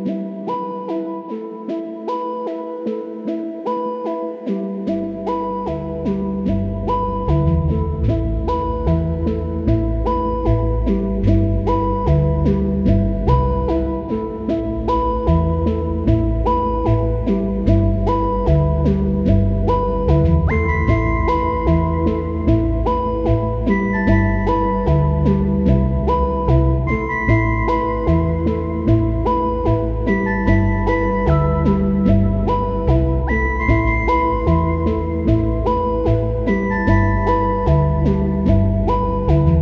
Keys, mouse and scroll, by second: 3.6 ctrl+t, 4.4-7.8 drag, 11.3-11.7 typing, 11.9 click, 12.8-13.9 typing, 14.5 click, 15.9 ctrl+t, 16.2 right click, 17.3-20.2 drag, 20.2 right click, 21.3-23.3 drag, 23.3 right click, 24.2-27.8 drag, 29.0-38.9 drag, 39.1 click.